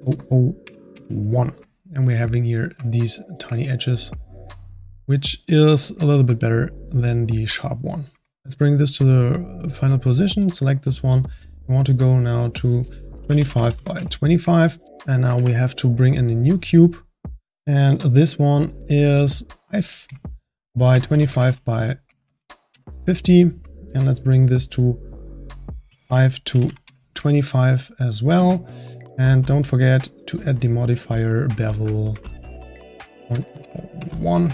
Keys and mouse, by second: 0.0 KP_0, 2.0-8.4 ctrl+middle drag, 3.2-3.6 drag, 8.4 click, 11.2 click, 12.5-14.8 drag, 14.8 shift+middle click, 14.9-15.3 drag, 15.3 shift+a, 19.6-22.4 drag, 25.1-27.8 drag, 27.8-29.6 middle drag, 29.6 click, 31.4-33.4 drag, 33.4 KP_0.